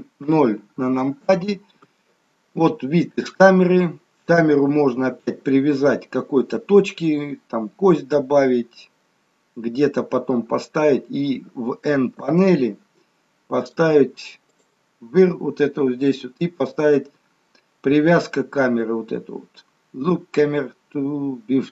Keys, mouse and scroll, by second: 0.2 KP_0, 12.2 n, 13.8 click, 14.6 click.